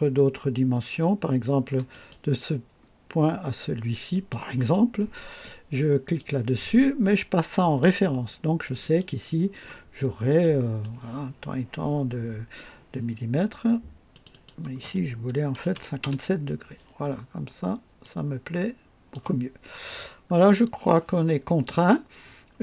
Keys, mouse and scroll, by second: 1.9 click, 4.1 click, 6.0 click, 7.6 click, 8.8 click, 9.9 scroll down 2, 10.4 right click, 14.1 click, 15.5 KP_5, 15.7 KP_7, 16.0 KP_Enter, 18.0-19.3 drag, 20.5 right click.